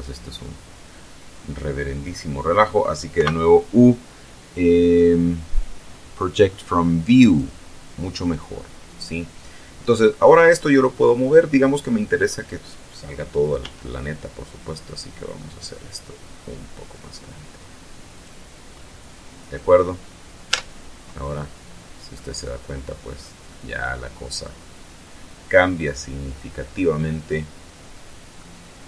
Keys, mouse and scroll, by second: 3.3 u, 7.4 click, 13.7 s, 18.2 click, 20.6 Tab, 21.8-22.2 scroll down 2, 22.2-23.5 middle drag, 23.5 scroll up 2, 23.6-25.8 middle drag, 25.8 scroll up 2, 26.0-28.6 middle drag, 28.6 scroll up 2.